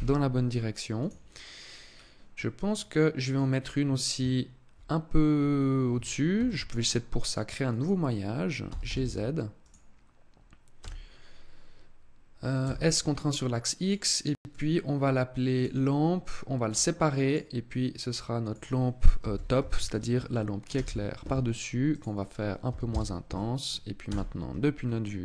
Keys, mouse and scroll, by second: 0.8 click, 1.8 scroll down 1, 2.1 middle click, 6.1 shift+a, 8.4 g, 9.5 click, 10.6 s, 13.6 click, 14.1 click, 16.3 click, 17.0 click, 21.6 click, 23.7 KP_0, 24.4 scroll up 4.